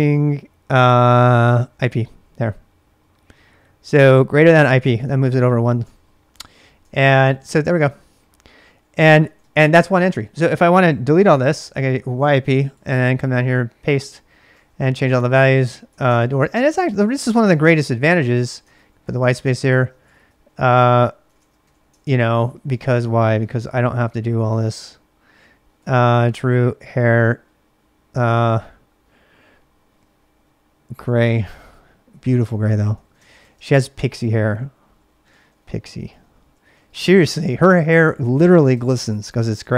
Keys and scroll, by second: 1.4-2.3 typing, 4.8-9.2 typing, 11.2-13.4 typing, 14.6-27.1 typing, 19.4 ctrl+[, 19.4 ctrl+j, 31.0-31.5 typing, 32.7-38.1 typing, 38.5 ctrl+[, 39.6-39.7 typing.